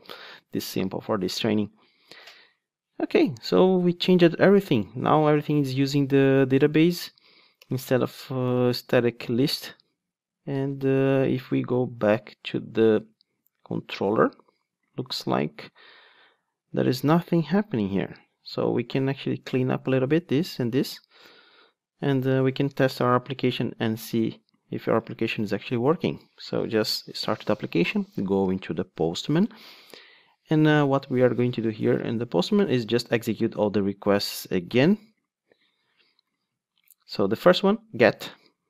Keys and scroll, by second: 7.3 alt+Return, 13.5 super+1, 19.8 super+x, 25.4 ctrl+d.